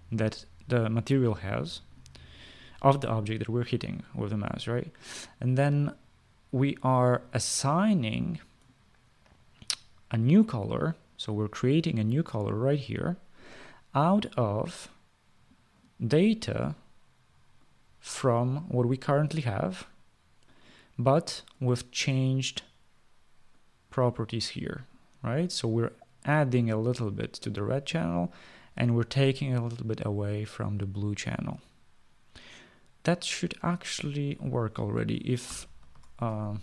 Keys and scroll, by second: 35.9 ctrl+s.